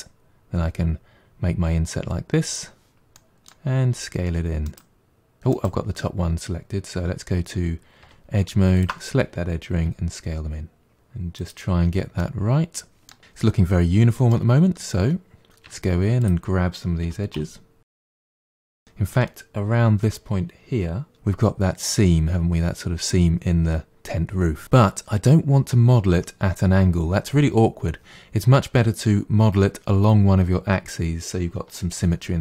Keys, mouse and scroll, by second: 3.2 middle click, 3.9 s, 8.1 2, 8.8 alt+click, 9.8 s, 12.2-14.4 middle drag, 15.7 1, 16.2 click, 17.1 g, 18.2 middle click, 18.5 click, 18.7-21.1 middle drag.